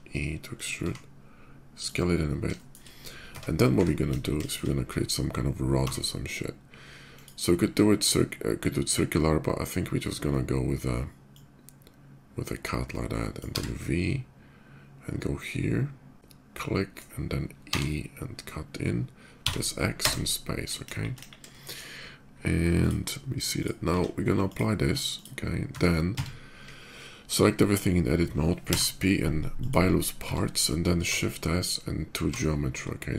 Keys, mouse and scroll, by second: 0.3 click, 0.6 s, 1.5 click, 2.3 shift+middle click, 2.9 Tab, 3.3 middle click, 3.9 KP_5, 4.2 middle drag, 4.4 middle click, 5.7 d, 6.8 click, 11.0-13.1 drag, 13.3 v, 13.9 v, 16.3-16.7 middle drag, 17.5 e, 19.8 space, 20.6 shift+KP_5, 21.3 shift+middle click, 22.6 shift+click, 23.3 shift+click, 23.5 q, 24.2 ctrl+q, 24.2 ctrl+click, 24.9 click, 25.5 Tab, 25.9 a, 28.5 p, 29.3 click, 30.0 Tab, 31.6 shift+s.